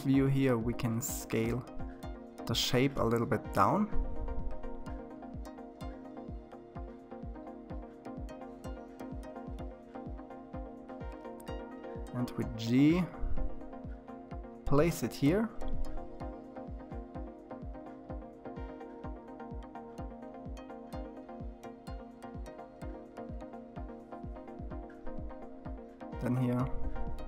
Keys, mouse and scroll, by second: 1.0 s, 8.3-10.2 scroll up 2, 10.2 g, 14.7-15.2 scroll down 3, 15.2-17.5 middle drag, 17.5 KP_3, 20.2-22.8 middle drag, 23.6 click, 25.1 click.